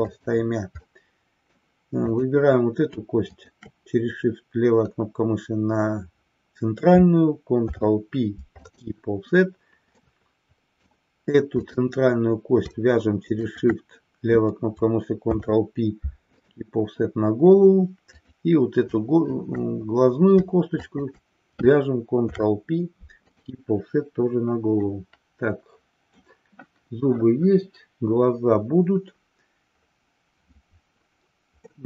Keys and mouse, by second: 0.9 middle click, 2.1 click, 3.4-3.9 shift+drag, 7.7 ctrl+p, 10.0-10.9 middle drag, 11.7 click, 13.4 shift+click, 15.3 ctrl+p, 18.1 click, 20.9 shift+click, 22.1 ctrl+p, 24.9-26.4 middle drag, 31.7-31.8 middle drag.